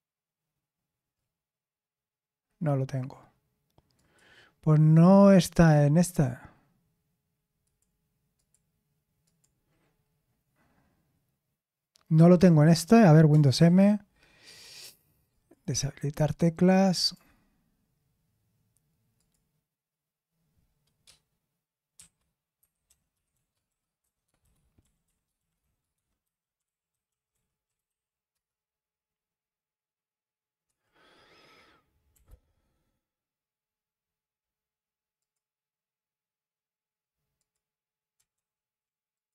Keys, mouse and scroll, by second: 3.9 click, 5.1 click, 6.0 click, 7.6 click, 8.3 click, 9.2 click, 13.5 super+m, 15.3 click, 16.0-17.0 right drag, 17.0 click.